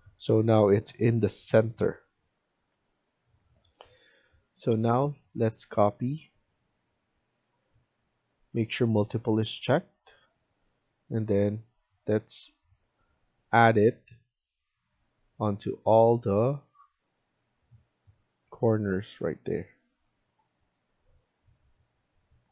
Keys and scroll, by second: 3.3 F1.